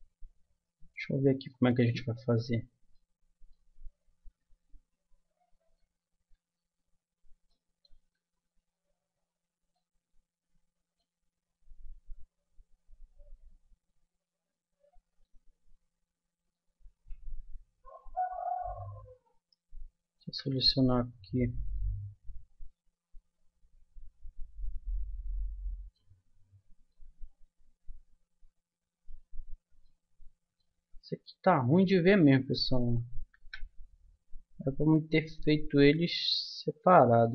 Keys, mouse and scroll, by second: 0.6 middle click, 1.8 z, 2.4 z, 5.8 Tab, 6.3 Tab, 6.8 z, 8.1 Tab, 11.8 middle click, 14.1-16.9 middle drag, 16.9 a, 17.4 a, 20.2 a, 20.9 middle click, 21.7-23.6 middle drag, 26.1-27.2 middle drag, 29.3 middle click, 32.4-34.1 right drag, 33.3 a, 34.1-36.2 middle drag, 36.2 right click.